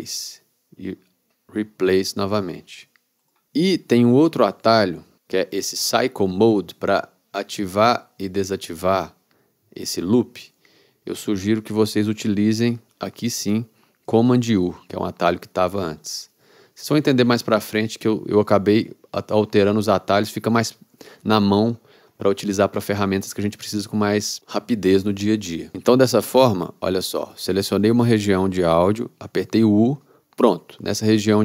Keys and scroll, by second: 14.6 super+u, 29.7 u.